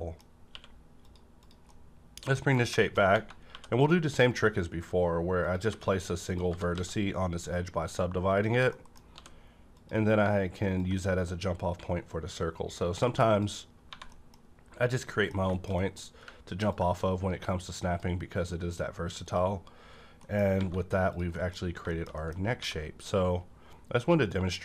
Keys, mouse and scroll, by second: 0.5 q, 0.9 click, 1.0 click, 1.7 middle click, 1.7 scroll down 1, 2.8 middle click, 3.0 scroll up 1, 3.4 2, 3.7 click, 4.3 right click, 5.3 click, 5.7 1, 6.2 click, 6.5 g, 6.7 x, 8.3 click, 8.3 g, 8.5 Tab, 8.7 middle click, 9.1 d, 9.7 click, 11.1-13.0 drag, 13.8 scroll down 2, 13.9 1, 14.1 middle click, 14.4-14.7 scroll up 1, 14.7 click, 15.1 middle click, 15.5 shift+middle click, 15.8 shift+middle click, 16.7-19.6 drag, 19.6-20.2 scroll down 1, 20.2 middle click, 20.5 scroll up 1, 20.6 alt+a, 21.1 click, 21.3 middle click, 21.6 scroll up 1, 21.9 middle click, 22.2 middle click, 22.4 scroll up 1, 22.6 d, 24.2 click, 24.3 click.